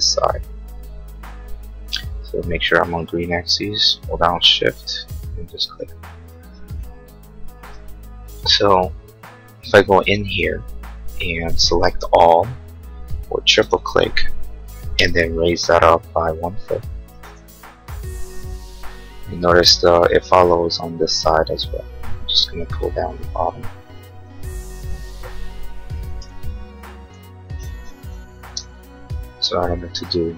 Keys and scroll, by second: 7.6 space, 12.2 ctrl+a, 14.9 m, 17.1 1, 17.3 Return, 24.3 p, 25.9 1, 26.3 Return, 28.4 space, 28.7 Escape.